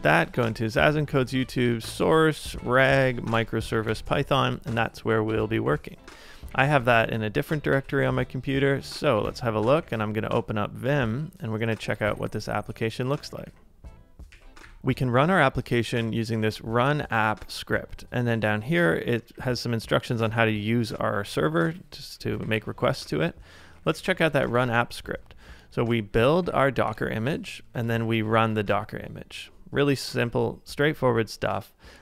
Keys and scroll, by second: 0.0-2.6 typing, 5.3 ctrl+a, 5.4-9.7 typing, 10.9 Return, 13.4-14.7 typing, 15.9-16.4 typing, 18.5-24.5 typing, 25.8-28.4 typing, 30.2 ctrl+c, 30.8-32.0 typing.